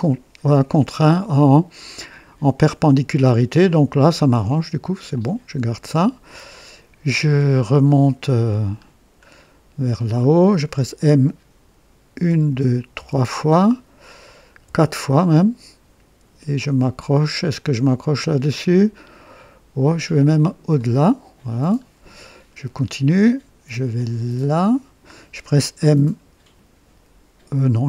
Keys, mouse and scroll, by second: 5.0 click, 6.9-7.3 scroll down 2, 7.8 right click, 8.6-9.3 scroll down 4, 12.1-12.9 typing, 14.6 typing, 20.7 click, 21.7 scroll down 1, 22.2 right click, 24.5 click.